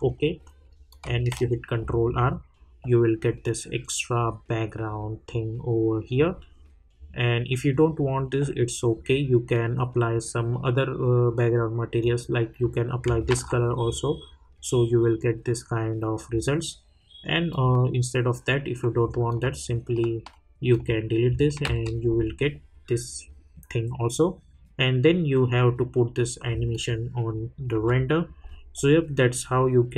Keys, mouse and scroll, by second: 0.9 click, 1.3 ctrl+r, 12.0 click, 13.3 ctrl+r, 17.5 click, 19.3 alt+click, 21.6 ctrl+r, 26.7 click.